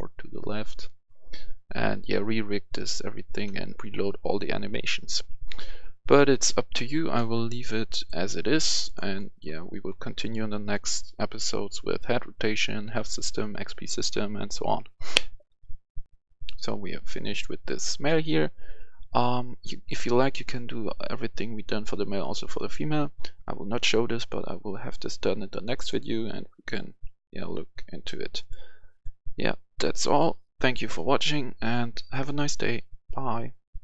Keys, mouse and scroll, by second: 9.0 right click, 9.4-9.8 scroll down 1, 9.8-12.9 right drag, 16.0 click, 16.0 F10, 20.4-26.8 drag, 28.4 click.